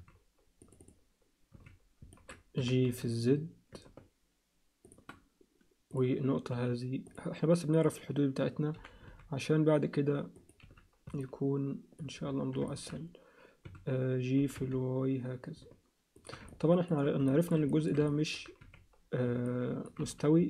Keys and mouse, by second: 0.6 click, 0.8 click, 1.5 z, 2.1 ctrl+middle click, 2.6 g, 6.5 z, 7.0 click, 7.7 click, 8.7 g, 10.6 z, 11.2 alt+middle click, 12.7 alt+shift+middle click, 13.6 a, 14.4 g, 16.5 ctrl+alt+middle click, 17.3 alt+shift+middle click, 17.7 ctrl+alt+middle click, 18.1 alt+middle click, 18.6 z, 19.5 alt+middle click, 20.0 z.